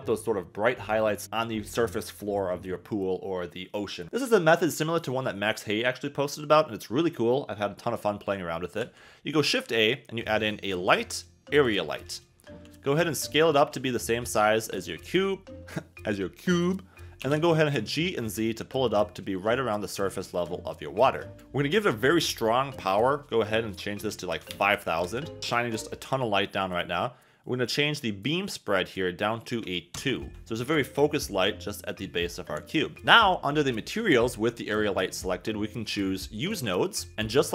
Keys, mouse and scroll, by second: 12.6 s, 17.2 g, 17.3 z, 20.3 click, 21.3-25.0 drag, 24.3 0, 28.9-29.9 drag.